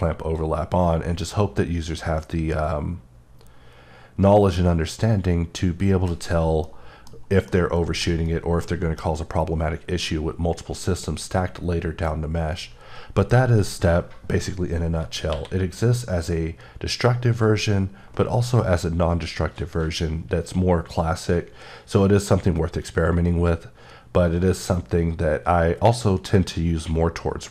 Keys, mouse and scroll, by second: 0.7 click, 6.6 middle click, 7.3 scroll, 7.5 middle click, 15.1 scroll up 1, 15.3 q.